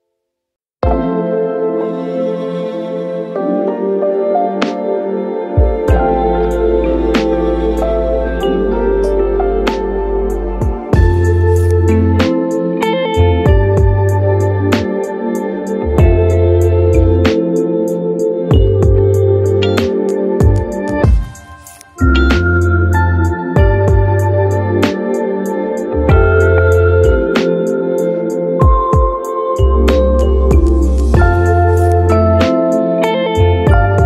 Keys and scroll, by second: 6.2 j, 8.3 space, 10.0 Delete, 12.6 v, 19.1-22.2 typing, 23.5 space, 29.8 Delete, 30.2-31.8 typing, 31.9 Return, 32.5 Return, 33.2-34.0 typing.